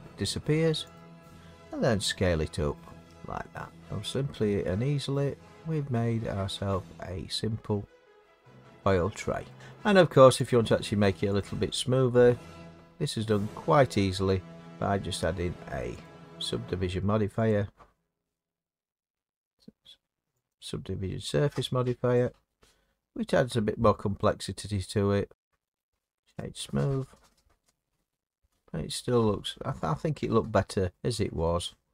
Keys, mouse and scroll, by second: 0.9 click, 1.8 s, 3.0 click, 3.6-6.4 scroll, 8.3-8.9 scroll, 8.9-9.4 scroll, 9.8-10.4 scroll, 10.4 click, 11.4 click, 14.6 click, 16.0 click, 17.5 click, 20.5 click, 25.3 middle click, 25.8 right click, 26.4 click, 30.9 middle click.